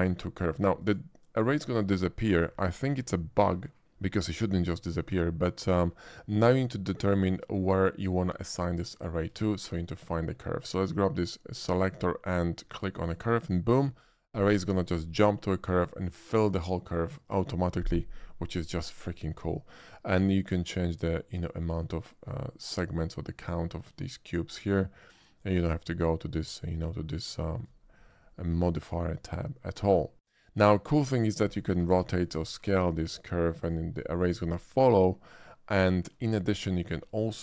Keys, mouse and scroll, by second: 0.8 click, 5.2-5.8 shift+middle drag, 9.6 middle click, 11.6 shift+click, 13.1 click, 19.3-25.5 drag, 27.4 shift+middle drag, 27.8-28.3 scroll up 1, 28.3 shift+middle drag, 28.7-30.3 shift+middle drag, 31.1 shift+click, 32.0 r, 32.2 right click, 32.5 s, 33.6 click, 35.9 shift+middle click, 36.4-37.3 shift+middle drag.